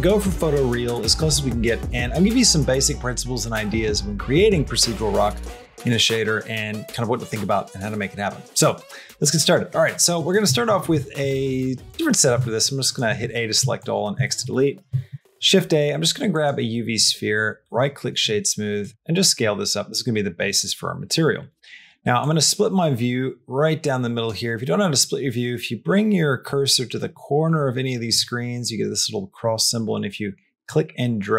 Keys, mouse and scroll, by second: 9.5 middle click, 10.0 middle click, 10.4 shift+middle click, 11.3 click, 12.5 x, 12.9 a, 13.4 x, 14.0 shift+middle click, 14.9 shift+a, 16.8 right click, 18.5 s, 18.9 shift+middle click, 19.2 middle click, 22.0-24.1 drag, 30.6-31.3 drag.